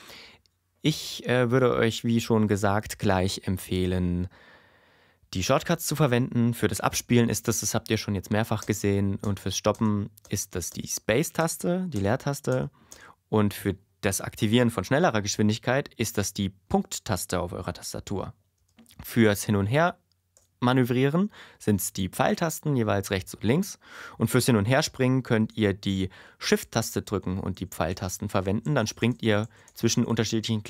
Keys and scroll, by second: 7.0 space, 8.6 space, 16.6 ., 18.6 space, 19.3 Left, 20.3 Right, 26.8 shift+Right, 27.9 shift+Left, 30.1 shift+Right.